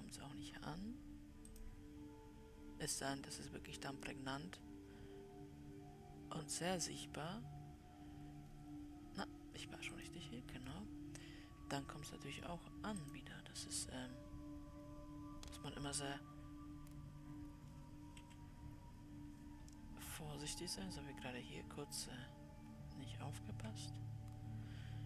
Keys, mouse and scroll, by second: 18.6 g.